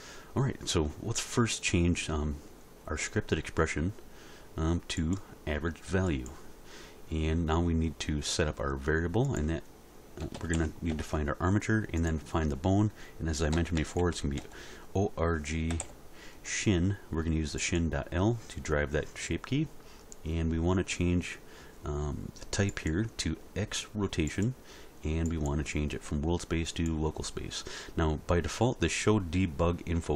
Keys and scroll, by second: 10.2 r, 10.3 i, 10.5 g, 10.9 Return, 13.5 o, 13.8 r, 14.0 g, 14.4 -, 15.7 s, 15.8 h.